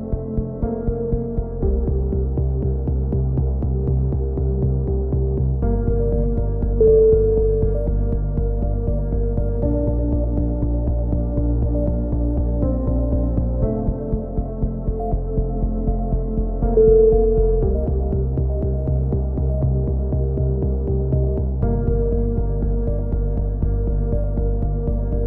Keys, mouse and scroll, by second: 0.4 x, 0.7 click, 1.1-4.4 right drag, 2.7 f, 4.2 f, 4.4 a, 4.4 z, 4.9 right click, 6.0 right click, 6.1 click, 11.4 ctrl+z, 11.6 ctrl+z, 11.9 ctrl+z, 12.1 ctrl+z, 12.3 ctrl+z, 12.9 ctrl+z, 13.1 ctrl+z, 13.3 ctrl+z, 13.6 ctrl+z, 13.9 ctrl+z, 14.0 ctrl+z, 14.6 a, 15.4 click, 15.8-16.8 right drag, 16.8 ctrl+z, 16.9 ctrl+z, 17.2 ctrl+z, 17.4 ctrl+z, 17.7 ctrl+z, 17.9 ctrl+z, 18.1 ctrl+z, 18.8-20.5 drag, 19.9 x, 21.6 ctrl+z, 22.9 click, 23.9 g.